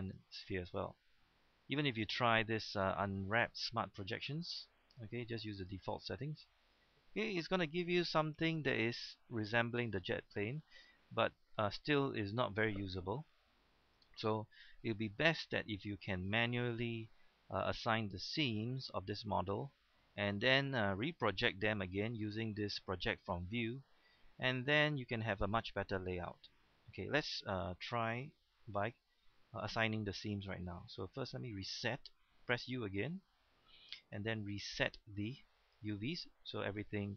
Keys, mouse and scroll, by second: 0.7 u, 3.5 u, 3.9-4.9 drag, 6.5-7.8 scroll up 1, 8.2 shift+middle click, 8.5-10.3 scroll up 1, 15.5-17.1 middle drag, 17.3-18.7 scroll up 1, 19.1 middle click, 20.0-20.4 scroll down 1, 20.5 middle click, 22.0 u, 25.4-28.5 middle drag, 29.2-31.3 scroll up 1, 31.4 u, 33.6 u, 35.6 click.